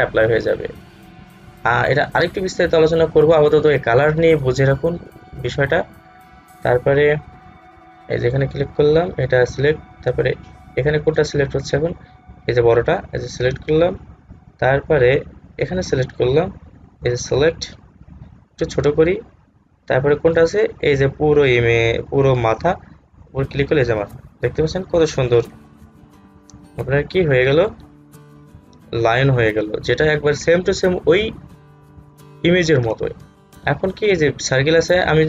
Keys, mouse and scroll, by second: 6.7 click, 8.9 click, 13.1 click, 14.7-15.7 scroll down 1, 15.7 click, 18.7 alt+scroll down 1, 20.4 click, 23.4 click, 25.1 scroll down 1, 30.5-31.4 alt+scroll down 1.